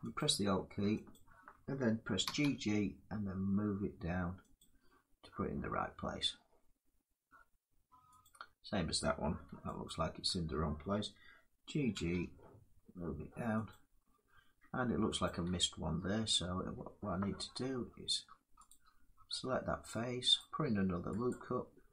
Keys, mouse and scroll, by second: 0.9 alt+click, 1.9 g, 2.0 g, 4.2 click, 7.9 click, 9.5 alt+click, 11.6 g, 11.7 g, 13.2 g, 13.8-16.4 alt+drag, 16.4 g, 20.0 click, 20.9 click.